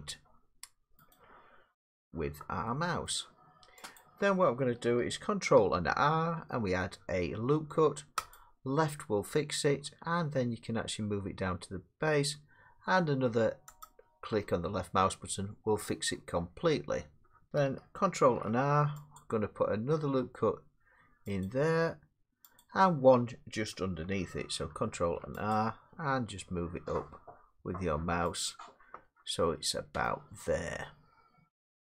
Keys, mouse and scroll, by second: 1.1 click, 3.1 middle click, 4.0 click, 5.8 ctrl+r, 8.4 click, 13.9 click, 18.2 ctrl+r, 19.2 click, 21.5 click, 22.6 click, 24.9 ctrl+r, 25.5 click, 28.5 click, 30.1 middle click.